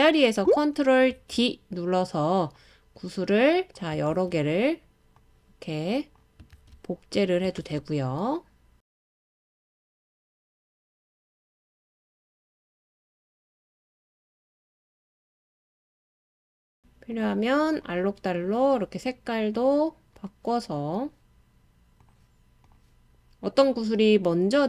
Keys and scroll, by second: 1.1 super+d, 4.1 super+d, 6.5 super+d, 7.6 super+d.